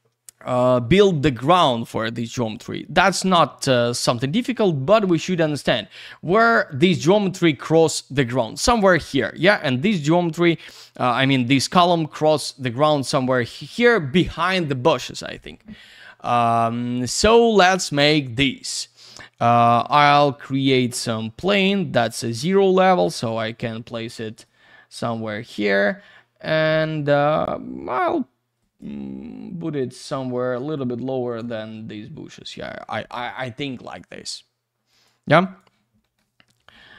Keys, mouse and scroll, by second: 2.5 click, 5.2 F3, 18.4 click, 19.6 click, 21.4 click, 23.3 F3, 23.8 w, 24.4 click, 28.8 F3, 30.7 click, 33.8 click, 34.9 click, 35.4 click, 36.0 middle click.